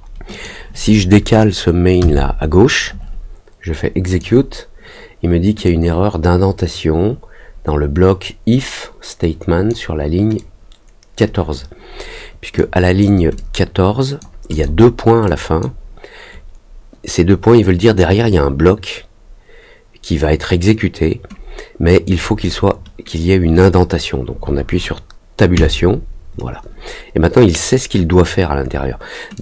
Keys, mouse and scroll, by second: 0.3 click, 4.0 click, 5.6-9.6 drag, 10.3 click, 12.5 click, 13.3 click, 14.4 click, 15.2 click, 22.0 click, 29.3 click.